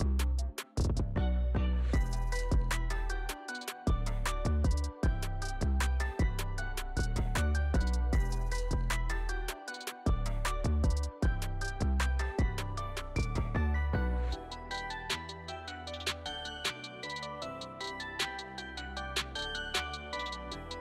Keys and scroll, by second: 0.3 g, 0.9 alt+q, 5.2 g, 7.2 g, 7.8 g, 12.4 g, 14.9 g, 15.9 alt+q, 18.3 j, 19.1 alt+q, 20.1 alt+q.